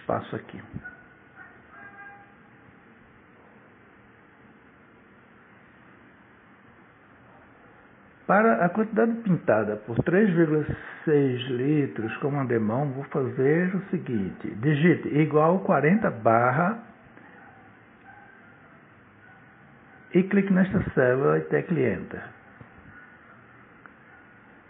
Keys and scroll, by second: 11.4 =, 14.5 4, 18.0 /, 23.5 Return.